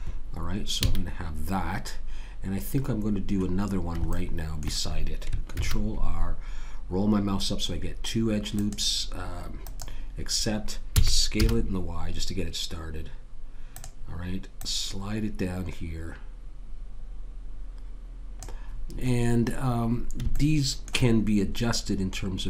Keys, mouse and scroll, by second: 0.8 a, 5.5 ctrl+r, 10.9 s, 14.6 click, 20.4 middle click, 21.2-22.4 middle drag.